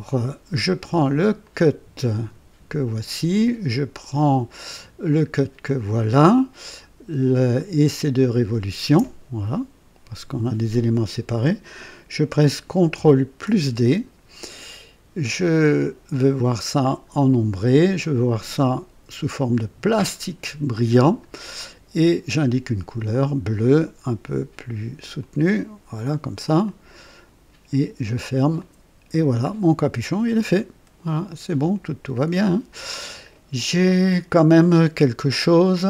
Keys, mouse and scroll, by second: 1.4 click, 5.6 ctrl+click, 7.5 ctrl+click, 8.3 ctrl+click, 13.4 d, 16.0 click, 16.8 click, 17.9 click, 19.5 click, 21.1 click, 23.0 click, 25.1 click, 26.6 click, 28.0 click, 28.5 click, 29.4-31.8 drag, 34.9-35.3 scroll down 2.